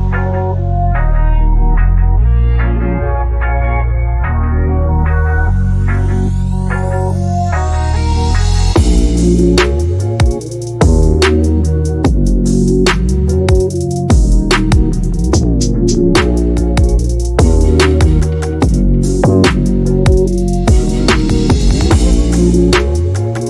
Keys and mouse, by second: 0.1 space, 0.3 space, 0.5 click, 2.9 ctrl+space, 3.4 click, 3.8 space, 4.3 space, 4.6 click, 4.8 click, 5.9 click, 6.3 shift+Left, 6.5 space, 8.8 space, 9.6 click, 10.0 KP_0, 10.8 middle click, 11.1 click, 11.6 click, 12.3 middle click, 12.8-17.3 typing, 13.5 click, 14.4 click, 14.6 click, 15.2 click, 16.5 click, 16.6 Tab, 16.9 click, 17.1 Tab, 17.1 middle click, 17.4 click, 18.0 middle click, 18.4 ctrl+z, 18.4 ctrl+z, 18.6 ctrl+z, 18.6 ctrl+z, 18.6 Tab, 18.7 ctrl+z, 18.8 ctrl+z, 19.5 ctrl+z, 19.7 Tab, 19.7 Tab, 19.8 middle click, 20.1 shift+Left, 20.1-23.0 typing, 21.2 middle click, 21.3 click, 21.7 click, 22.0 click, 22.8 click.